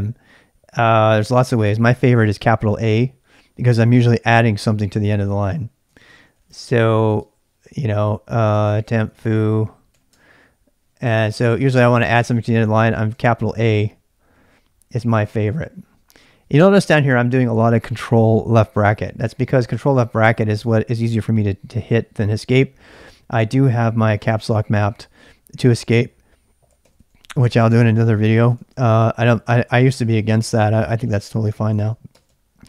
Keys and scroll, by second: 5.3 ctrl+[, 5.4-9.8 typing, 6.0 ctrl+c, 9.9 Tab, 10.1 Return, 11.1 ctrl+[, 11.1 ctrl+j, 11.6 k, 13.2 typing, 16.9 typing, 19.3 ctrl+[, 23.0 ctrl+[, 23.0 ctrl+j, 23.3 k, 24.8 Escape, 25.9-32.3 typing, 31.1 Escape, 31.8 Escape.